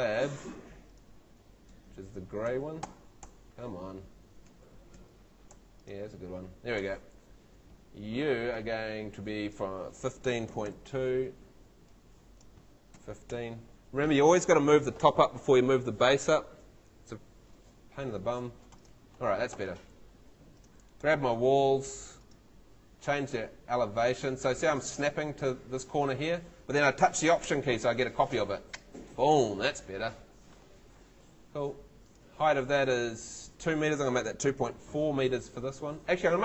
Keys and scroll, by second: 0.1 Tab, 1.7 Tab, 3.2 Escape, 4.5 Tab, 5.5 Escape, 9.8-11.1 typing, 13.0 1, 13.3 5, 19.5 Escape, 34.0-35.2 typing.